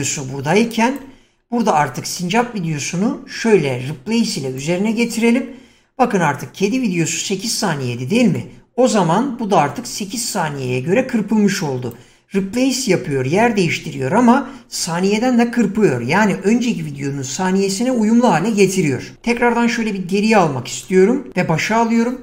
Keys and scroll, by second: 19.2 ctrl+z.